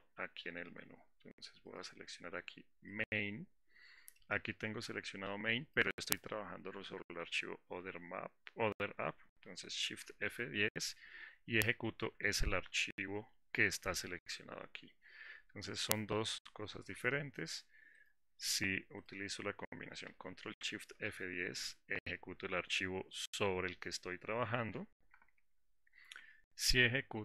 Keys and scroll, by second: 10.3 shift+F10, 20.8 ctrl+shift+F10, 25.3 alt+4.